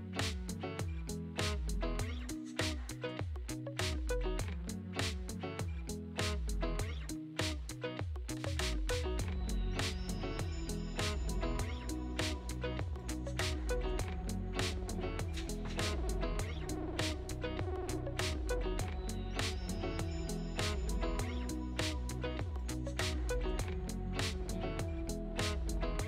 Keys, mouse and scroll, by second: 1.3-1.9 scroll up 2, 2.4 click, 4.2 shift+middle click, 4.6-4.9 scroll up 5, 5.0 shift+middle click, 5.4-5.8 scroll up 1, 5.8-8.0 shift+middle drag, 6.5-8.0 drag, 8.0 middle click, 9.5 n, 10.1 click, 10.4-10.9 scroll up 5, 10.9-12.2 shift+middle drag, 12.2-12.7 scroll up 11, 12.7 shift+middle click, 13.1-14.5 scroll up 1, 15.1 shift+a, 18.3-19.7 scroll down 2, 19.7-21.1 drag, 21.1 shift+a, 25.6-26.0 drag.